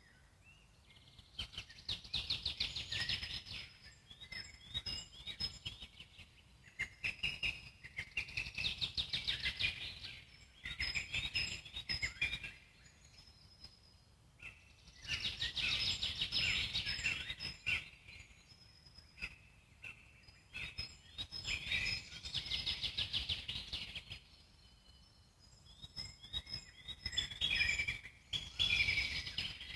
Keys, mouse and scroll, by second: 0.9-2.7 alt+middle drag, 2.7-9.5 ctrl+drag, 9.5 ctrl+z, 9.8 ctrl+click, 10.7 ctrl+z, 11.0 alt+middle click, 11.9-14.1 ctrl+drag, 14.1 middle click, 14.6 ctrl+click, 15.3 ctrl+z, 16.7-17.4 scroll up 4, 17.4-18.9 ctrl+drag, 18.9 scroll down 1, 19.1-21.0 alt+middle drag, 21.0-22.1 scroll up 1, 22.1-22.5 scroll up 4, 22.5 f, 23.3-24.3 ctrl+drag, 24.3 ctrl+z, 24.6-26.2 ctrl+drag, 26.2-27.2 alt+middle drag, 27.2 scroll down 1, 27.5 alt+middle click, 28.3-29.5 ctrl+drag, 29.5-29.7 scroll down 4.